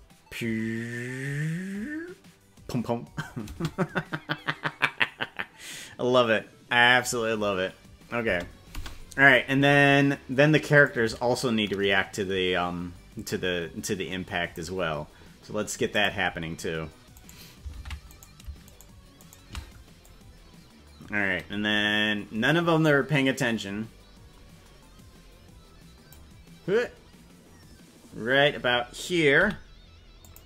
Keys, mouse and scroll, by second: 3.4 space, 8.2 space, 8.7 space, 10.8-14.5 drag, 15.9 click, 17.3 right click, 17.9 ctrl+Tab, 18.7 shift+right click, 20.0-26.1 drag.